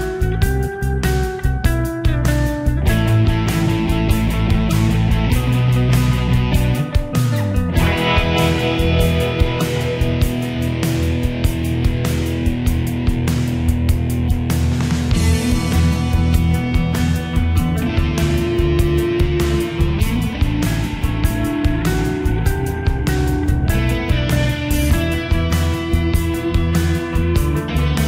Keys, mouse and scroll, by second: 23.6 right click, 25.0-28.0 drag.